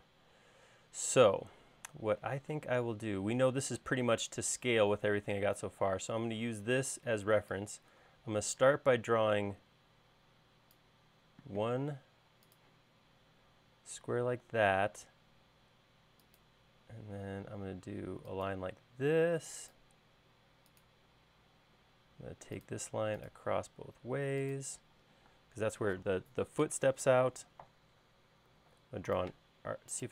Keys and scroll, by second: 2.5 r, 14.5 l, 21.9 l, 25.6 space, 28.8 a.